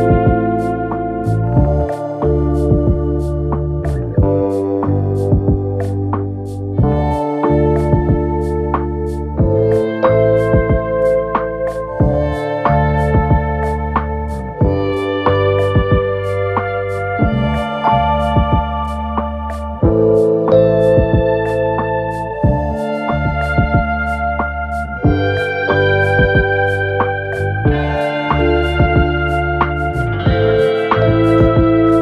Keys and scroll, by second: 0.5 ctrl+z, 0.6 ., 2.4 ctrl+z, 7.9 ctrl+z, 9.7 ctrl+z, 18.8 F1, 24.7 ], 25.0 ], 25.5 ], 25.8 ], 27.1 4, 27.9 3, 28.5 ], 29.9 3, 31.6 2.